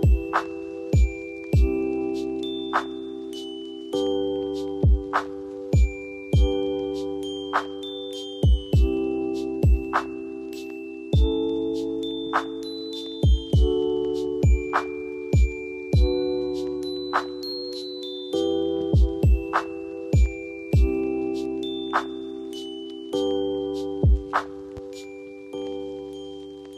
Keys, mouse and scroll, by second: 8.6 ctrl+click, 9.2 ctrl+j, 10.3 ctrl+t.